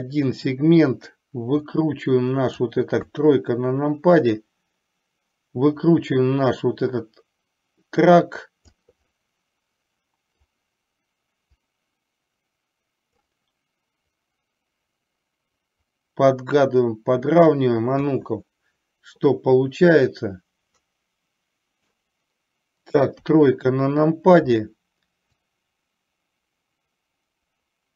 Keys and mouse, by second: 0.0 click, 2.0 click, 3.2 KP_3, 4.3-9.0 drag, 9.2-10.6 middle drag, 12.1-13.3 drag, 14.3-17.6 drag, 18.2 KP_1, 20.0 click, 20.3-22.1 drag, 23.2 KP_3, 25.6 click, 25.8-27.9 drag.